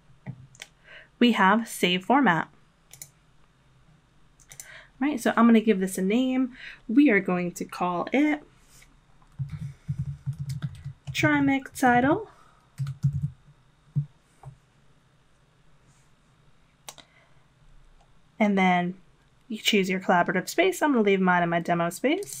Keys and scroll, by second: 9.3-13.6 typing.